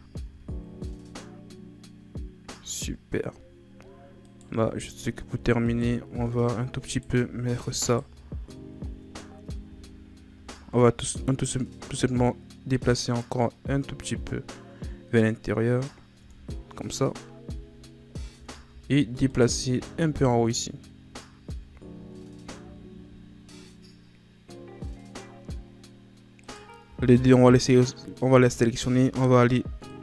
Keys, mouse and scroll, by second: 0.2 a, 0.5-2.1 scroll down 1, 2.1-3.6 scroll up 1, 3.6-4.2 scroll up 1, 4.2 right click, 4.5 Tab, 5.3 Tab, 5.6 right click, 6.1 Tab, 6.9 alt+right click, 7.8 right click, 9.6 a, 10.3 a, 11.5-14.7 drag, 16.2 Tab, 17.5 a, 18.1 scroll up 2, 18.3 Tab, 18.8-19.3 scroll up 1, 19.3 alt+right click, 20.2-21.5 drag, 21.5 Tab, 21.8-25.1 scroll down 5, 25.6-26.4 scroll up 1, 26.4 right click, 27.0 shift+right click, 27.6-28.3 scroll up 2, 28.3 Tab, 29.0 z, 29.9 right click.